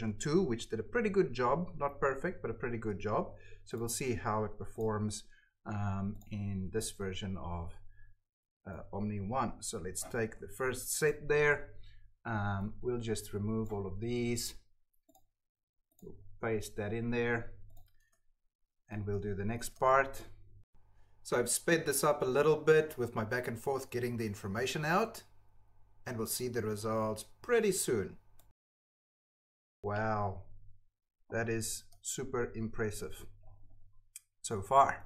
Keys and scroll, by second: 6.9 ctrl+v, 10.1 ctrl+c, 16.2 ctrl+v, 18.0 Tab, 19.0 alt+Tab, 19.6 Tab, 21.1 ctrl+c, 21.1 Tab, 21.3 ctrl+v, 21.9 Tab, 23.0 Tab, 23.5 Tab, 24.0 ctrl+c, 24.2 ctrl+v, 24.9 ctrl+c, 25.0 Tab, 26.3 Tab, 27.7 ctrl+c, 28.1 ctrl+v, 28.9 ctrl+v, 29.1 ctrl+c, 31.8 alt+Tab, 32.8 Tab.